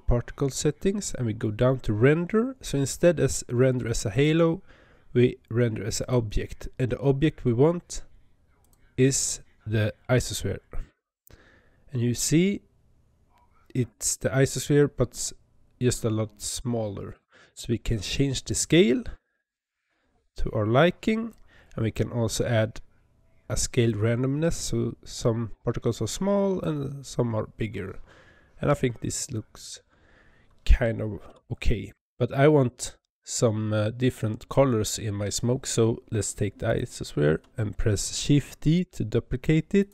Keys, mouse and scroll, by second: 0.1-1.3 scroll down 12, 1.3 scroll down 6, 4.0-7.0 drag, 8.5-11.5 drag, 17.8-20.8 drag, 23.7-26.8 drag, 36.5 click, 38.5 shift+d.